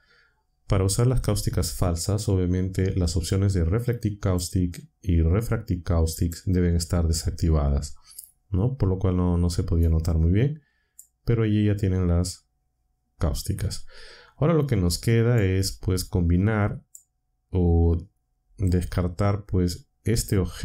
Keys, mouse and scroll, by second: 4.2 click, 6.1 click, 9.8-11.1 drag, 15.3-17.1 drag.